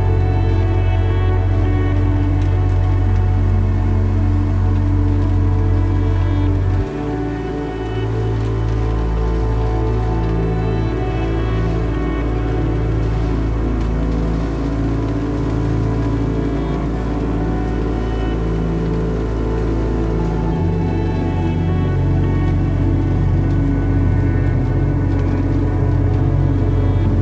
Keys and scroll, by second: 0.9 1, 6.4 1, 7.6 Caps_Lock, 13.3 [, 13.4 [, 13.5 [, 13.7 [.